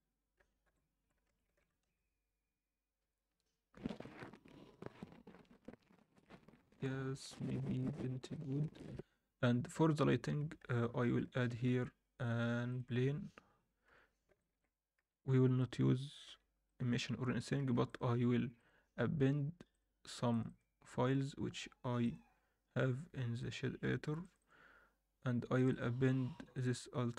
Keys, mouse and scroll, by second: 10.7 ctrl+s, 11.3 shift+right click, 11.7 shift+a, 13.8 KP_1, 14.4 alt+shift+middle drag, 15.0 g, 16.2 r, 17.6 ctrl+s, 17.8-27.1 drag.